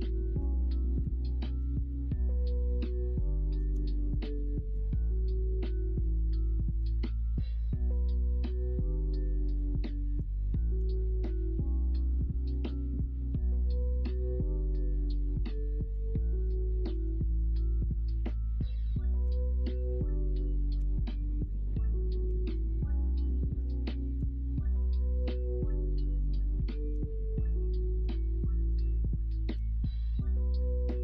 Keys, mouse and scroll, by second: 1.8-3.5 middle drag, 3.9 shift+middle click, 4.4 middle click, 6.0 Tab, 6.4 Tab, 7.1 Tab, 9.5 middle click, 10.5 middle drag, 10.9 shift+middle drag, 11.9 middle drag, 12.3 shift+middle drag, 12.9-14.1 middle drag, 15.2 shift+middle click, 16.1-16.9 middle drag, 16.9 Tab, 17.3 Tab, 18.2 Tab, 19.2 alt+z, 19.6 middle click, 20.0 alt+z, 20.7 x, 22.2 2, 23.7 ctrl+z, 24.4 middle click, 25.6 x, 26.3 middle click, 26.5 2, 28.7 alt+shift+click, 29.0 middle click, 29.5 ctrl+e.